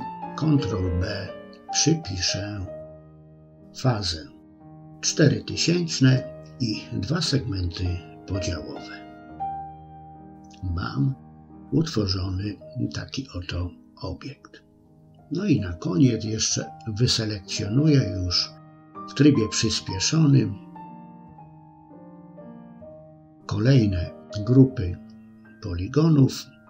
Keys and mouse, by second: 0.7-4.3 drag, 2.3 0, 7.0-8.3 middle drag, 8.8 middle click, 10.1 shift+middle click, 10.9 click, 13.0 alt+shift+click, 14.0 click, 15.5 click, 16.5 alt+shift+click, 16.7 middle click, 17.1 alt+shift+click, 17.3 middle click, 18.1 middle click, 18.6 middle click, 19.2 middle click, 20.5 middle click, 21.0 alt+shift+click, 21.2 middle click, 21.5 middle click, 22.1 middle click, 22.5 middle click, 23.3 middle click, 23.9 alt+shift+click, 24.2 middle click, 24.5 middle click, 25.3 middle click.